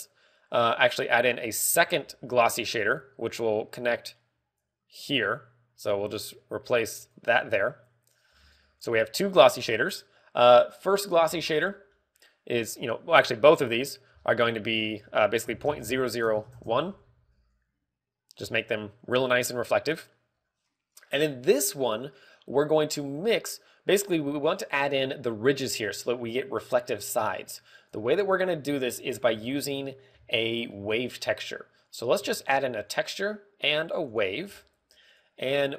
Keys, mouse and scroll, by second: 1.1 scroll up 1, 1.2 middle click, 2.5 click, 2.7 shift+d, 3.6 click, 4.1 click, 5.9 click, 7.3 click, 8.4 click, 9.3 scroll down 4, 9.5 middle click, 9.7-10.5 scroll up 4, 10.1 middle click, 11.3 scroll up 1, 14.0 click, 14.3-15.0 scroll down 6, 14.7 middle click, 15.0 scroll up 2, 15.6 ctrl+click, 15.6 scroll up 2, 18.1 ctrl+c, 19.4 ctrl+v, 20.0 ctrl+v, 20.4-20.9 scroll down 7, 20.8 middle click, 21.2 scroll up 2, 28.6 click, 32.8 click, 33.2 shift+a, 35.4 g.